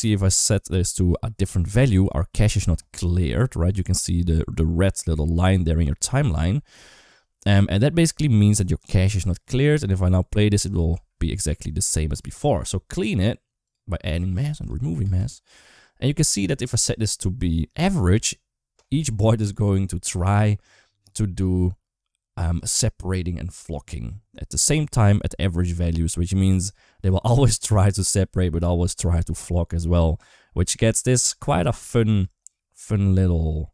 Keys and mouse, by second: 10.4 click, 10.7 space, 12.0 space, 14.4 click, 14.8 space, 31.6 shift+middle drag.